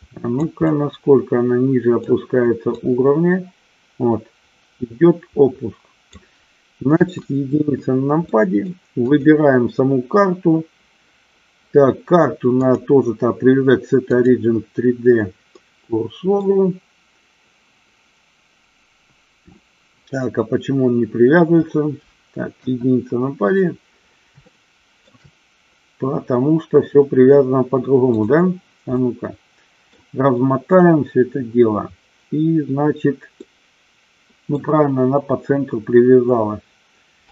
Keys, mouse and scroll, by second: 0.8 scroll up 1, 0.9-2.2 middle drag, 2.9-6.3 drag, 7.0 KP_1, 8.4-8.8 middle drag, 9.2 click, 12.9-14.4 drag, 15.6-16.5 middle drag, 22.6 KP_1, 24.6-25.2 shift+middle drag, 28.3 drag, 29.0-30.0 middle drag, 33.5-34.8 middle drag.